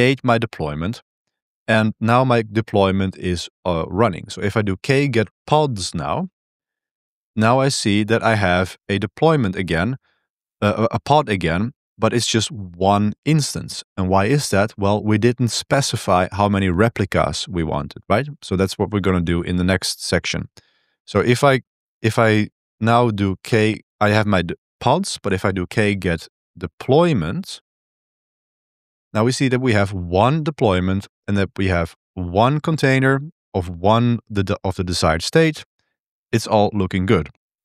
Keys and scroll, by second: 4.3-6.0 typing, 6.5 Return, 19.0 ctrl+b, 19.2 1, 20.5-23.5 typing, 22.6 ctrl+b, 25.4-27.6 typing, 27.6 Tab, 28.1 Return, 37.3-37.6 typing.